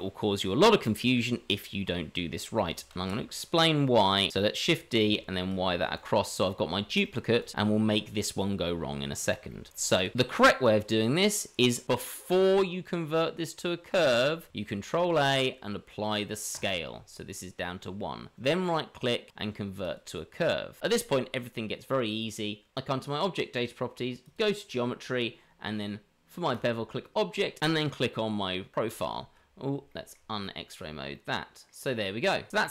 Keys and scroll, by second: 2.9 shift+d, 14.9 ctrl+a, 29.1 shift+z, 32.5 shift+Tab.